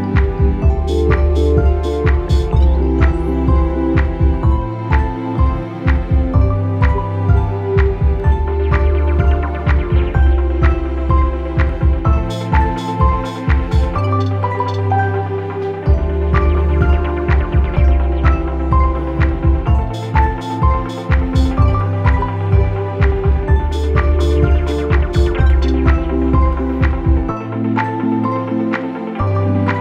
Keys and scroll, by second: 3.5 Up, 3.8 Up, 4.1 Up, 4.3 Up, 4.8 Down, 6.3 ctrl+-, 8.4 p, 10.3 ctrl+-, 11.0 ctrl+-, 16.3 ctrl+=, 17.8 ctrl+=, 21.4 ctrl+u, 21.7 Delete, 25.1 ctrl+-, 25.2 ctrl+-.